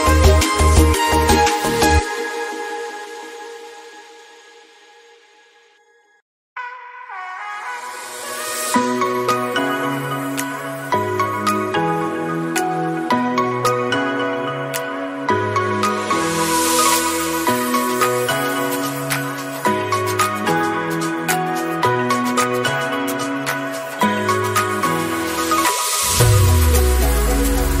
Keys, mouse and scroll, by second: 0.3 middle click, 0.8 s, 1.4 shift+middle click, 2.2 click, 2.8-3.3 scroll down 4, 3.3 click, 3.5-4.4 scroll up 10, 4.4-7.6 drag, 7.7 s, 8.4-10.2 drag, 10.9 click, 11.7 shift+middle click, 12.0-13.1 scroll up 3, 14.2 click, 14.6-15.4 scroll down 5, 15.4-25.0 drag, 25.0 /, 25.2-26.7 middle drag, 25.2-26.7 scroll down 6, 26.7 KP_0, 27.1 middle click, 27.1-27.8 scroll up 7.